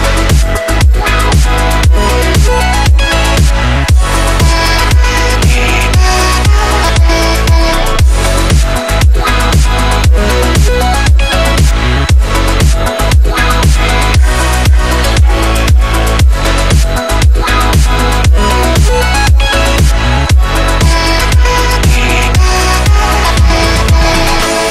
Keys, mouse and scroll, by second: 0.2 click, 0.3-0.7 space, 1.9-2.6 click, 2.9-3.5 space, 4.3 click, 5.3-5.9 alt+click, 5.7 right click, 6.6 ctrl+z, 7.5 click, 8.0 ctrl+z, 11.2-16.7 drag, 18.9 Down, 19.7 ctrl+z, 20.2 z, 21.4 shift+Down, 21.8 shift+Right, 23.4 click.